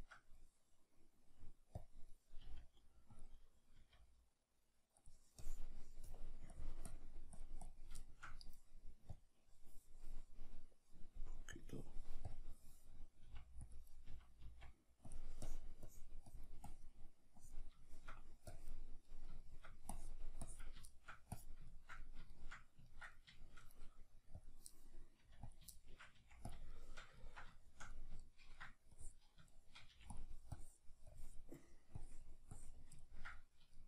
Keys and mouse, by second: 2.4 f, 3.2 click, 3.8 f, 5.0 click, 8.0-13.3 shift+middle drag, 13.3 f, 13.7 click, 14.1 f, 15.2 click, 17.9 shift+middle click, 18.5 click, 19.1 middle click, 19.9-20.9 drag, 20.9 shift+middle click, 21.4 click, 21.7-25.2 ctrl+middle drag, 25.2 f, 25.5 click, 25.8 shift+middle click, 26.2 f, 26.5 click, 26.7-28.9 shift+middle drag, 28.9 click, 29.5 shift+middle click, 29.9 f, 30.2 click, 33.0-33.8 ctrl+middle drag.